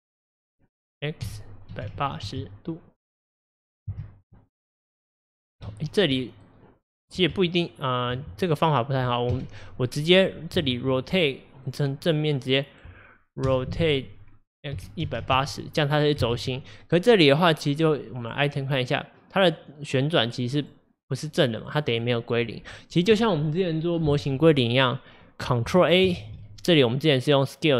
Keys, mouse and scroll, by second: 4.7 scroll down 1, 4.8 middle click, 5.8 ctrl+z, 6.2-7.4 middle drag, 7.4 Tab, 9.4 KP_1, 11.7 click, 12.1 click, 13.5 r, 18.3 click, 20.6 click, 21.2 click, 21.7 drag, 21.9 click, 26.3 ctrl+a.